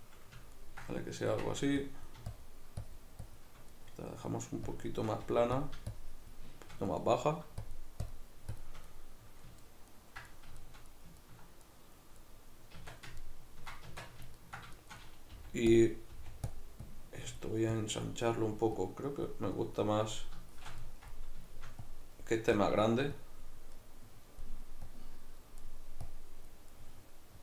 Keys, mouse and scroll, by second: 1.9-3.7 drag, 3.7-4.7 middle drag, 4.7 shift+click, 5.3 f, 6.0 shift+click, 6.9 middle click, 7.7-8.9 shift+drag, 8.9-15.8 middle drag, 12.8 Tab, 13.9 Tab, 15.3 f, 15.8 click, 16.1 middle click, 16.1 f, 16.5 click, 20.1-21.9 middle drag, 21.9-23.8 drag, 23.8-24.9 middle drag, 24.9 click, 25.6 middle click, 26.1 click, 26.7-27.4 middle drag.